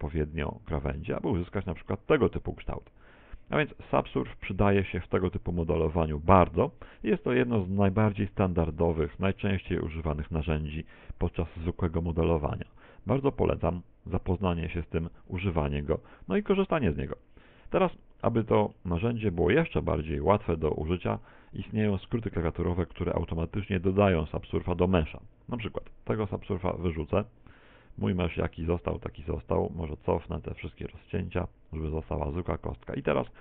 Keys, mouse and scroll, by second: 1.6 Tab, 1.6 click, 2.0 middle click, 6.2 middle click, 6.7 middle click, 7.8 Tab, 8.4 Tab, 9.0 a, 9.4 alt+shift+right click, 10.0 alt+shift+right click, 11.2 s, 15.4 Tab, 15.4 click, 15.8 middle click, 18.0 middle click, 18.7 middle click, 19.5 middle click, 21.2 shift+middle click, 26.8 click, 27.8 Tab, 29.2 ctrl+z, 29.4 ctrl+z, 29.6 ctrl+z, 29.7 ctrl+z, 29.9 ctrl+z, 30.0 ctrl+z, 30.2 ctrl+z, 30.4 ctrl+z, 30.6 ctrl+z, 30.7 ctrl+z, 31.0 ctrl+z, 31.2 ctrl+z, 31.4 ctrl+z, 31.4 ctrl+z, 32.1 Tab, 33.1 middle click.